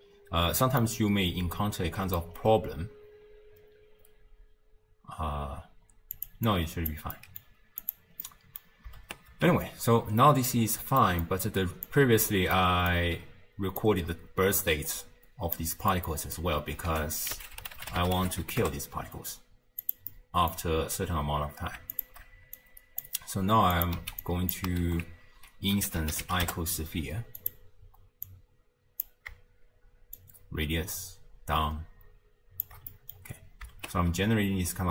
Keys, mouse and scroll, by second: 0.2 space, 0.8-2.4 middle drag, 2.4-3.2 scroll down 3, 6.2 click, 6.5 click, 7.2-7.8 middle drag, 7.8 click, 8.2 middle click, 9.1 shift+space, 10.8 space, 11.0-11.9 middle drag, 11.9 click, 12.6 middle click, 13.1-13.8 scroll down 1, 13.8 click, 15.9-16.9 middle drag, 16.9 ctrl+a, 20.1-22.0 middle drag, 22.0 alt+shift+click, 22.6 click, 23.8 click, 24.0 x, 24.2 click, 24.8 ctrl+a, 28.3 drag, 30.2-32.9 shift+drag, 32.9 middle click, 33.2-33.8 scroll up 2, 33.8 shift+space, 34.4-34.9 scroll up 1.